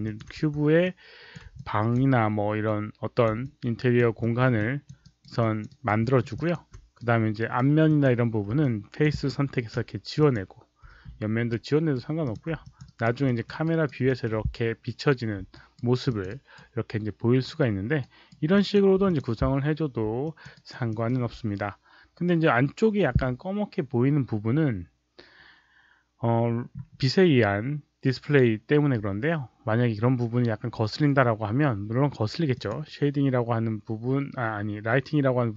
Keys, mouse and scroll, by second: 0.0 alt+click, 0.3 r, 0.7-1.3 alt+drag, 1.5-1.9 alt+drag, 2.6-3.2 drag, 3.3-3.9 alt+drag, 4.1 alt+middle click, 4.5 alt+drag, 4.9 alt+right click, 5.3 alt+click, 5.6 alt+right click, 6.0 alt+middle click, 6.3 alt+click, 6.9 right click, 7.8 click, 8.5 alt+click, 9.7 Delete, 10.1 click, 10.8 Delete, 11.4 right click, 12.1 click, 12.6 alt+click, 12.8 alt+right click, 13.2 alt+middle click, 13.5 alt+right click, 14.0 alt+middle click, 15.4 alt+right click, 16.0 alt+click, 16.2 alt+right click, 17.9 alt+right click, 18.5 alt+click, 19.0 click, 20.2 alt+click, 20.5 alt+right click, 20.8 alt+middle click, 32.5 click.